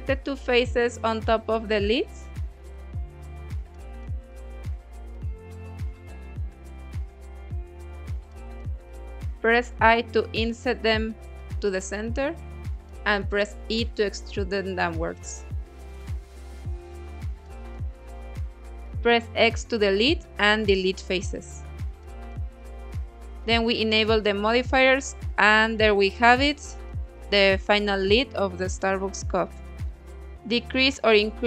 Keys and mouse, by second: 0.1 shift+click, 1.7 3, 2.2 click, 3.6 middle click, 5.5 middle click, 8.8 i, 10.7 click, 11.1 middle click, 12.5 e, 16.7 click, 17.4 x, 19.6 middle click, 20.0 Tab, 20.3-20.7 middle drag, 21.7-22.6 drag, 23.1 click, 24.3-25.4 middle drag, 26.2 middle click, 27.6 click, 28.8-31.1 drag, 31.2-31.4 middle drag.